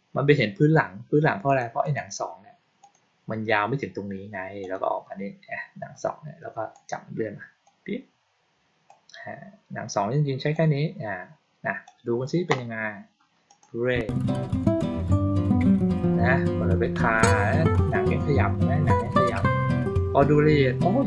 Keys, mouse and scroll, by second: 1.4 click, 1.7 right click, 2.7 click, 4.5 click, 6.6 click, 8.8-10.4 drag, 11.8 click, 13.4 click.